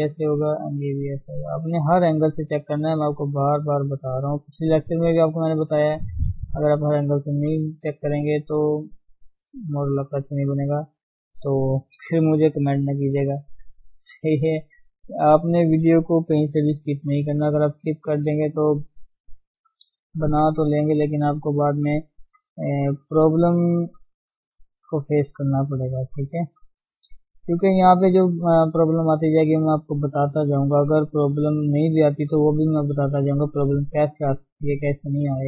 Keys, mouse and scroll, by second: 0.5 click, 0.6 g, 1.3-3.1 middle drag, 3.1 click, 3.3 g, 5.6 middle click, 6.5 click, 6.7 g, 7.6-12.3 middle drag, 12.3 scroll down 2, 12.5-16.5 middle drag, 16.5 ctrl+KP_1, 17.2-17.6 scroll up 1, 17.6 shift+middle click, 18.4 click, 19.3 click, 20.3 g, 21.7 click, 22.0 g, 22.8 click, 23.3 g, 24.3 click, 24.7 g, 26.1 click, 26.5 g, 27.4 click, 27.6 g, 29.8 click, 30.1 g, 31.1 click, 31.2 g, 32.5 click, 33.0 click, 33.8 g, 34.9 click, 35.1 g.